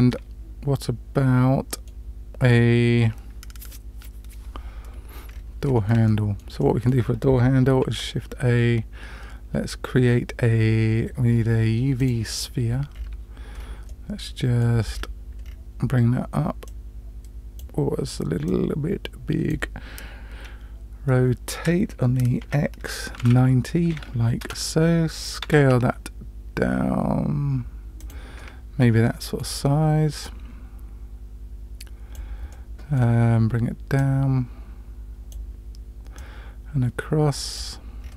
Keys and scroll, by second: 7.8 shift+a, 21.6 r, 25.4 s.